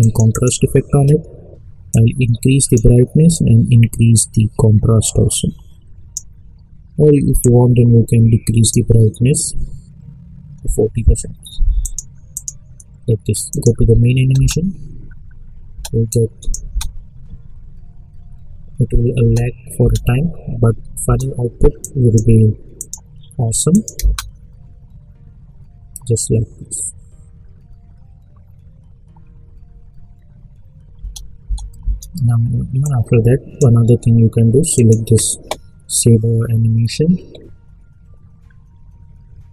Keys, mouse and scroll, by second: 0.0-3.3 drag, 2.2 click, 3.6-6.1 drag, 11.8 click, 14.3 space, 16.1 click, 16.7 space, 19.2 space, 21.8 click, 23.9 space, 30.9 space, 32.8-34.7 drag.